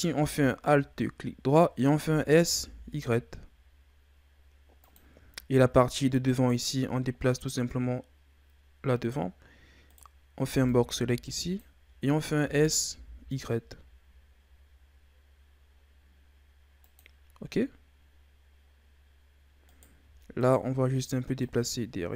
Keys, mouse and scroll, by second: 2.0 s, 5.2-6.3 scroll down 6, 6.3 right click, 7.5-9.9 drag, 9.9 right click, 10.4 b, 12.3 s, 18.0-18.7 scroll down 2, 18.7-19.7 scroll up 1, 19.7 right click, 20.4 shift+right click, 21.4-22.1 drag.